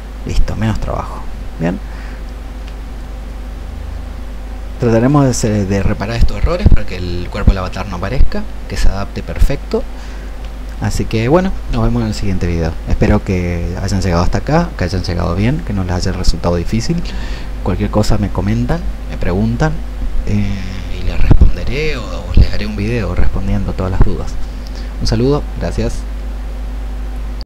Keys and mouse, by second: 0.2-11.1 drag.